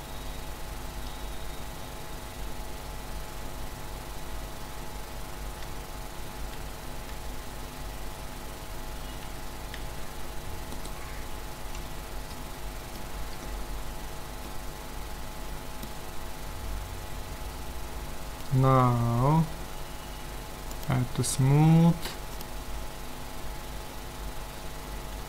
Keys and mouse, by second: 0.9 a, 5.7 z, 6.4 z, 7.1 Tab, 8.4 Tab, 9.2 Tab, 9.8 a, 10.7-12.3 right drag, 11.8 z, 12.3 click, 13.2-15.2 middle drag, 20.7-24.1 drag.